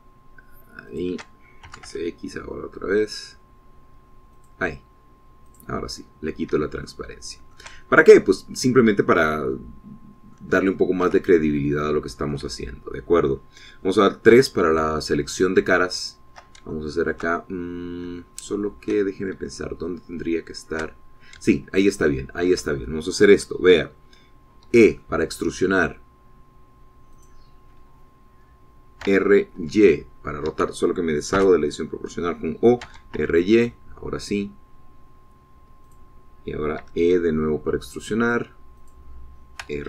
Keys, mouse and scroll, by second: 2.0 shift+click, 2.8 shift+s, 3.0 x, 5.5 click, 6.6 click, 7.4 scroll down 1, 7.7 shift+middle click, 8.2-10.1 shift+middle drag, 10.6-11.6 drag, 12.7 ctrl+click, 15.4 3, 16.5 shift+click, 17.1 shift+click, 17.9 shift+middle click, 18.5-19.5 shift+middle drag, 20.2-20.5 shift+scroll down 1, 20.6-22.1 shift+middle drag, 22.6-23.8 shift+middle drag, 25.8 e, 28.3 click, 30.1 r, 30.7 y, 31.7 Escape, 32.5 o, 34.0 r, 34.3 y, 37.0 click, 37.9 e.